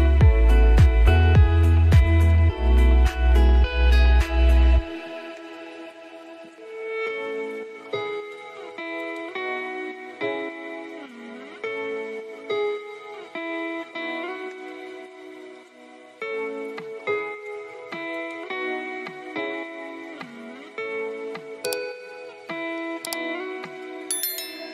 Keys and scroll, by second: 6.1 ctrl+space, 15.6 ctrl+shift+], 19.9 ctrl+space.